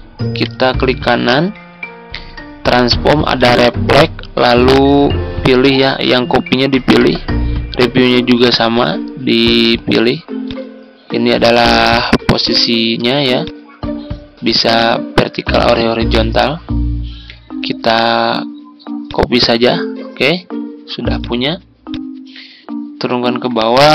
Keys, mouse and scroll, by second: 0.2 right click, 3.2-23.9 drag.